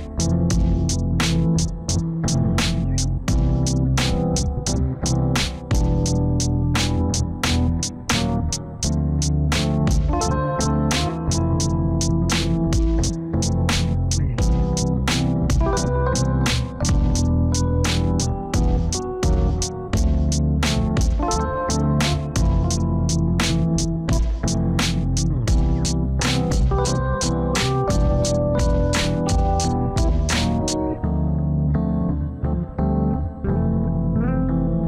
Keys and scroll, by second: 21.0 F3.